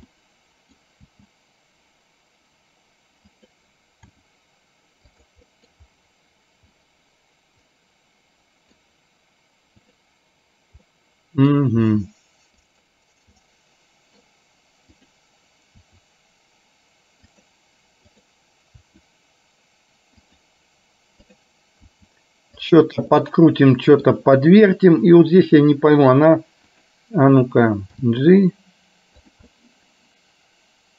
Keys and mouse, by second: 0.2 middle click, 1.1 g, 4.2 r, 5.6 middle click, 6.7-8.9 middle drag, 9.9 click, 11.0 middle click, 11.9 r, 13.5 middle click, 15.0 click, 15.9 r, 18.1 click, 21.5 click, 22.0 r, 23.2 middle click, 28.2 g, 29.6-30.9 middle drag.